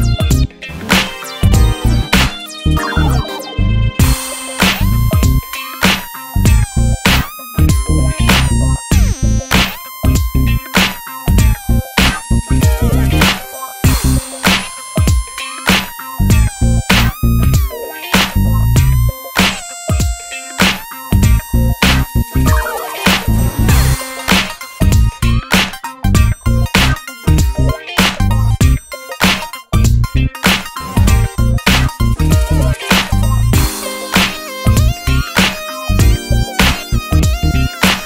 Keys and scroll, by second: 2.8 super+c, 3.1 super+v, 8.8 super+c, 9.0 super+v.